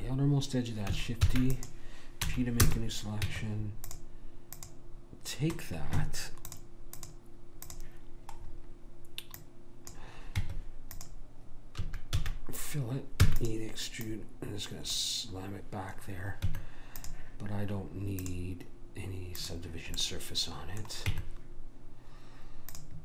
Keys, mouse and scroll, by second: 1.3 shift+d, 2.3 p, 3.2 Tab, 4.6 click, 6.6 click, 10.4 Tab, 11.8 a, 12.2 f, 13.2 e, 14.1 click, 16.5 Tab, 18.2-21.3 drag, 20.1 right click, 21.1 Tab.